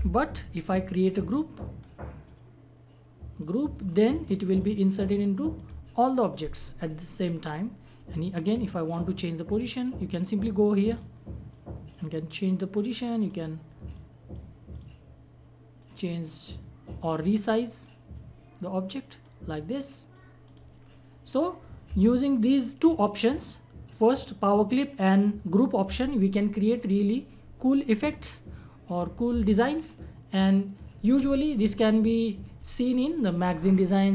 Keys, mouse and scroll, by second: 0.3-2.2 drag, 2.2 right click, 3.4 click, 4.5 right click, 5.5 click, 8.5 scroll up 1, 10.8 click, 20.8-21.4 scroll down 1.